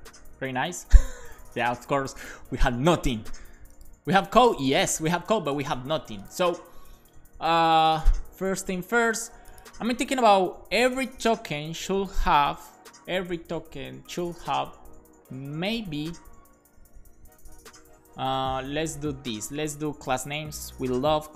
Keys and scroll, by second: 16.0 Left, 16.2 Left, 16.5 Left, 16.8 Left, 19.5-21.3 typing.